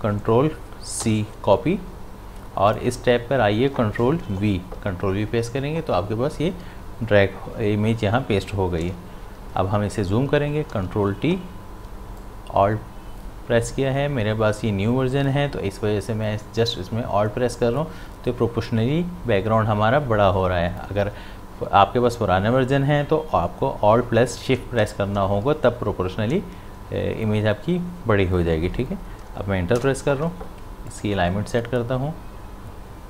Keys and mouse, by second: 0.4 click, 1.0 ctrl+c, 2.7 click, 4.3 ctrl+v, 8.8 ctrl+v, 10.7 ctrl+t, 12.2-22.2 alt+drag, 29.7 Return, 30.9-33.0 drag.